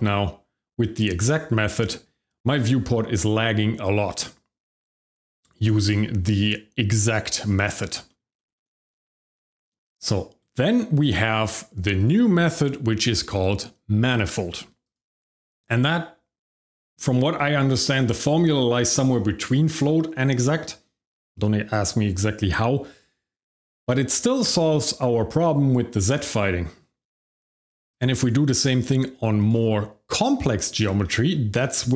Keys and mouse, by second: 6.3 click, 7.6 shift+middle drag, 8.1 middle click, 8.4 shift+middle click, 8.5 middle click, 8.9 shift+middle click, 9.3 middle drag, 10.0 click, 11.9 click, 15.0-18.5 drag, 27.9 click, 29.4 click, 30.2-30.7 shift+middle drag, 31.0 middle drag, 31.7 shift+middle drag.